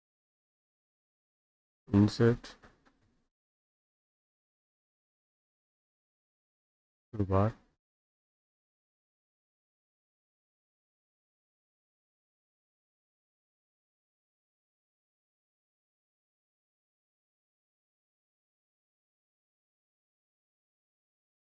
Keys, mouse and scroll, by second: 1.6 click, 3.8 click, 6.8 click, 9.9 click, 10.9 click, 11.7 click, 12.8 click, 13.5 click, 14.7 click, 15.3 click, 16.4 middle click, 17.0 middle click, 18.9 click, 20.0 click, 21.1 click.